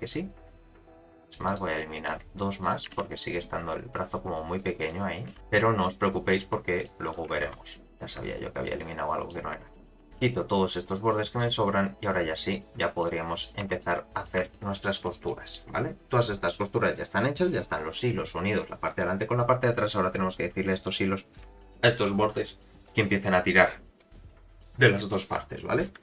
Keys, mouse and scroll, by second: 1.4 click, 1.8 middle click, 2.6 shift+click, 2.9 x, 4.8 shift+click, 5.3 x, 5.4 middle click, 6.8 middle click, 7.5 ctrl+z, 7.9 click, 8.6 middle click, 9.8 shift+click, 10.1 x, 11.9-12.3 scroll down 1, 13.0 middle click, 13.0 scroll down 5, 13.6 Tab, 13.8 middle click, 14.5 shift+middle drag, 15.0 middle click, 19.5-20.6 scroll up 4.